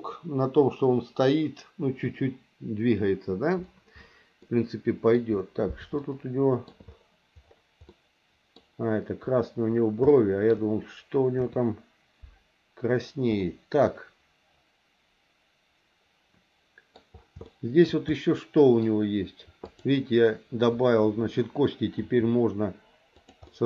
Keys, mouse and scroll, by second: 4.5 middle click, 6.0 shift+middle click, 7.9 middle click, 10.0 shift+middle click, 11.3 KP_3, 13.4-17.0 middle drag, 17.4 shift+middle click, 18.1 middle click, 19.7 click, 22.0 r, 23.5 middle click.